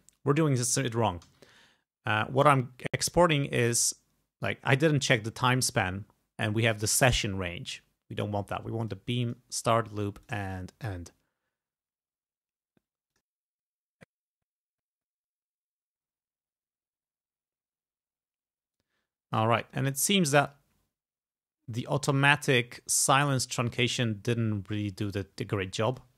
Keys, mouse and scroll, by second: 1.4 alt+e, 2.6 click, 3.6 click, 7.7 click, 8.9 click, 9.3 click, 10.2 click, 13.1 click, 14.3 click, 18.8-19.8 drag, 20.4 click, 23.1 click, 25.9 click.